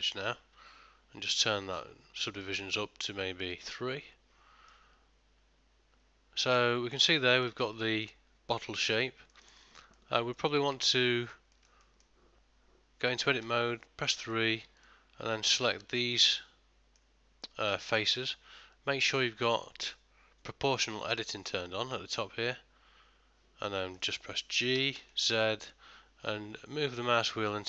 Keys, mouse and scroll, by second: 2.5 click, 4.8 middle click, 7.4 ctrl+middle click, 7.7 shift+middle click, 8.2 middle click, 9.4 ctrl+middle click, 9.7 shift+middle click, 10.0 middle click, 10.4 ctrl+middle click, 10.9 Tab, 11.6 ctrl+middle click, 11.9 shift+middle click, 13.5 3, 14.3 click, 14.9 shift+click, 16.2 middle click, 17.4 middle click, 23.8 middle click, 24.8 g.